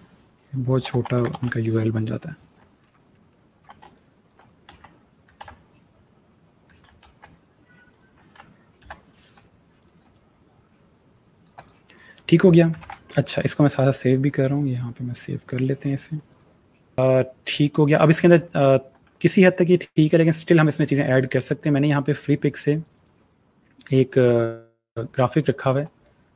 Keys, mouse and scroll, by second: 0.0-1.4 typing, 2.5 alt+scroll down 1, 3.5 scroll down 1, 3.6 space, 3.8 click, 4.1 space, 4.5 ctrl+z, 7.7 click, 9.6 click, 9.9 space, 9.9 click, 10.4 space, 11.4 click, 12.6 ctrl+s, 14.3 click, 16.9 space, 18.3 click, 18.7 space, 21.6 click, 24.8 space, 25.0 click, 25.4 alt+scroll up 1, 26.0 click.